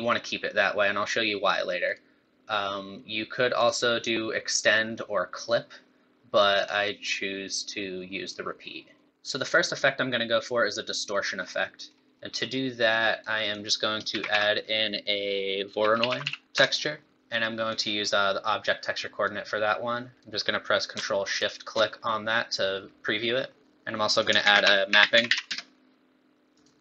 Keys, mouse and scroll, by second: 1.8 click, 6.5 click, 9.1 scroll down 1, 11.4 scroll down 4, 11.6 middle click, 12.3 middle click, 12.9 click, 13.4 click, 14.1 shift+a, 17.1 click, 17.7 click, 20.0 click, 21.4 ctrl+shift+click, 23.6 click, 24.1 click, 24.4 shift+a, 25.3 p.